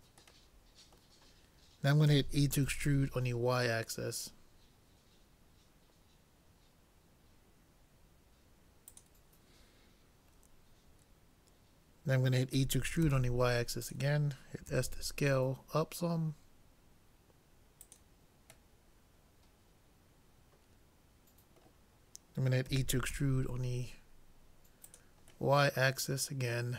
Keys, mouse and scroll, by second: 2.1 e, 12.5 e, 14.7 s, 18.8-20.7 middle drag, 22.7 e, 25.6 middle click.